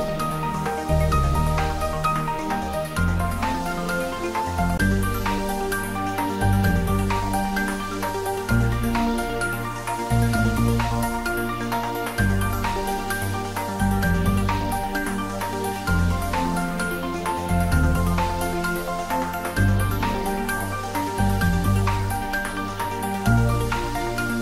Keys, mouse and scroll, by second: 0.5 click, 1.4 alt+shift+click, 3.8 click, 5.6-6.8 typing, 7.9 Right, 13.1 Return, 16.1 Tab, 16.5-17.1 middle click, 17.2 shift+z, 18.4-19.3 scroll up 1, 19.3 right click, 19.8 click, 21.4-21.8 scroll up 1, 23.1-24.3 middle drag.